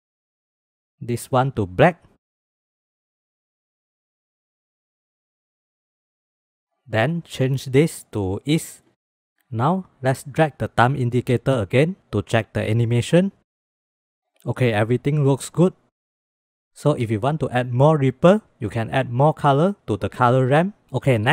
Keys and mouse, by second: 1.3 click, 1.7 click, 3.8 click, 4.8-5.4 drag, 6.1 click, 7.5-8.8 drag, 10.1-12.2 drag, 15.7-16.2 drag.